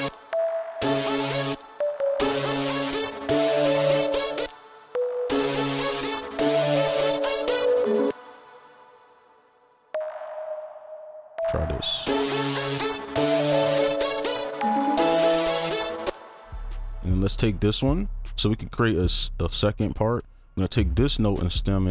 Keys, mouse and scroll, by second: 0.0 space, 0.7 space, 1.5 space, 1.9 double click, 2.7 right click, 5.2 space, 8.1 space, 8.8 ctrl+click, 9.1 ctrl+Up, 9.2 right click, 10.1 right click, 13.6 space, 13.9 alt+click, 16.0 space, 16.9 ctrl+click, 20.5 shift+click.